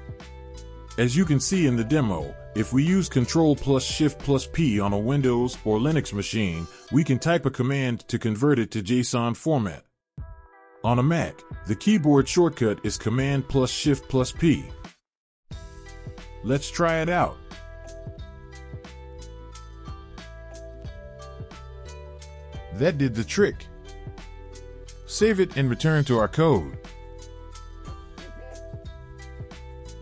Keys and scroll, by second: 17.9-19.7 typing, 20.9 Return, 27.3 ctrl+s.